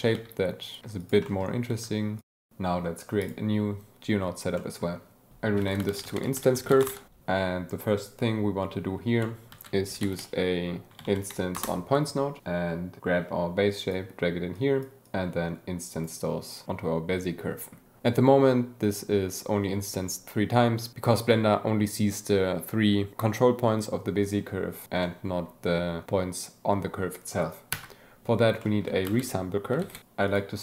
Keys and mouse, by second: 0.0 click, 0.2 click, 0.4 s, 0.7 click, 1.1 Tab, 2.5 s, 3.2 click, 4.5 click, 5.5-6.9 drag, 9.4 shift+a, 10.9 BackSpace, 13.0-14.0 drag, 14.5 click, 15.0-16.0 drag, 16.7-17.7 drag, 20.9 click, 21.5 Tab, 22.0 a, 22.4 click, 25.0 click, 27.7 Tab, 28.5 click, 29.0 shift+a, 30.2-30.6 drag.